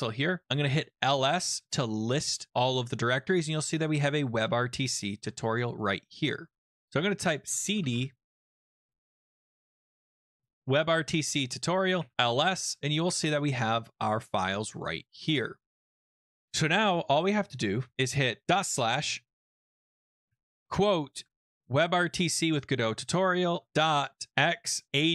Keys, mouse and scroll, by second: 0.2-0.9 typing, 4.0 typing, 5.7 click, 5.8 click, 6.7 click, 7.2-12.4 typing, 11.0 Return, 15.8 click, 17.0 click, 18.4 typing, 19.2 Return, 20.3 Up, 21.0-21.9 typing, 23.4-25.1 typing.